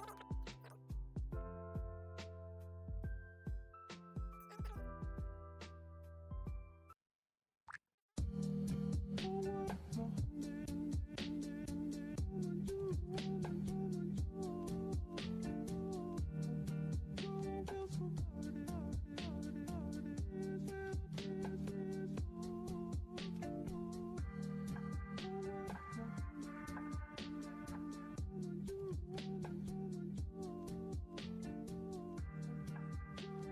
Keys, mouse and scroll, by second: 0.2 click, 0.3 Escape, 0.5 scroll down 3, 1.0 click, 1.0 scroll, 1.4 r, 1.5 r, 2.0 scroll, 2.1 click, 2.2 click, 2.7 r, 2.7 r, 3.6 click, 3.7 click, 3.8 scroll, 3.9-4.4 scroll down 6, 5.6 F11, 5.9 middle click, 6.0 middle click, 6.2 middle click, 6.3 middle click, 6.5 middle click, 7.8 scroll, 7.9-8.5 typing, 9.1 click, 9.9 click, 10.2 Escape, 10.5 click, 10.8 r, 11.4 click, 12.2-14.4 typing, 12.5 click, 12.7 click, 14.4 click, 14.7 click, 15.9 click, 16.0 Escape, 16.4 click, 16.8 click, 16.9 Escape, 18.2 click, 18.9 click, 19.0 r, 19.3 click, 19.7 click, 20.9 click, 21.0 Escape, 22.7 click, 22.9 click, 24.7 r, 25.1 click, 25.4 click, 26.7 click, 26.8 Escape, 27.9 click, 28.2 click, 28.6 ctrl+z, 28.8 click, 29.2 click, 29.5 r, 29.8 r, 30.0 click, 30.7 click, 31.9 click, 32.0 Escape, 32.8 click, 33.1 Escape.